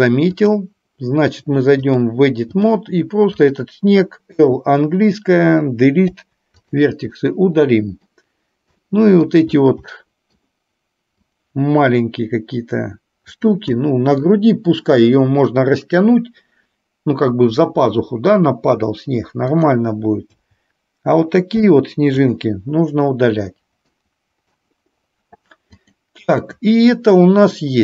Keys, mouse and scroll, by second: 0.4 click, 1.9-2.9 drag, 3.4 click, 4.4 l, 6.0 Delete, 7.3 middle click, 8.9 middle click, 9.9 middle click, 11.3 click, 13.3 click, 13.9 middle click, 19.5 click, 20.5 l, 21.5 Delete, 24.0 middle click, 25.9 click.